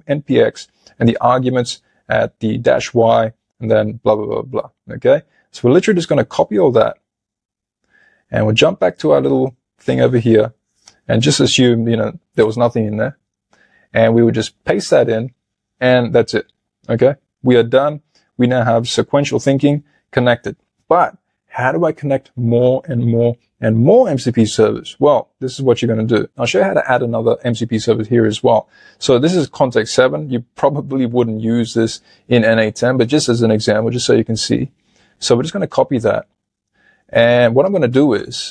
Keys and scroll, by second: 10.7 super+a, 12.4 BackSpace, 14.5 super+v, 36.3 super+Tab.